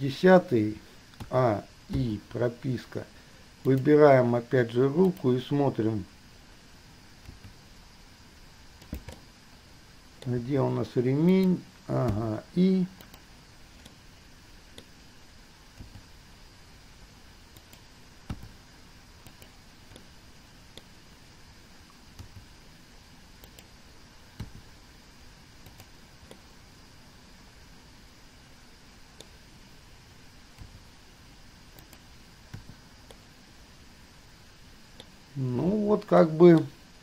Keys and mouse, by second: 1.4 a, 2.2 i, 3.9 click, 5.3 click, 7.6 g, 9.4-10.6 middle drag, 12.3 i, 13.3 click, 14.1-15.3 middle drag, 16.1 g, 18.6 i, 19.4 middle click, 20.2 middle click, 22.4 g, 24.7 i, 25.9 click, 26.6-30.8 drag, 30.8 g, 32.8 i, 33.3-35.3 drag, 36.3-36.8 drag.